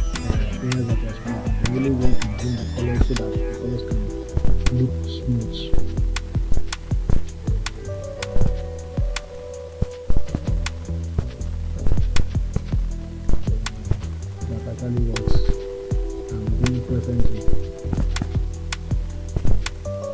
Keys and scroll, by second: 12.2 space, 13.5 ].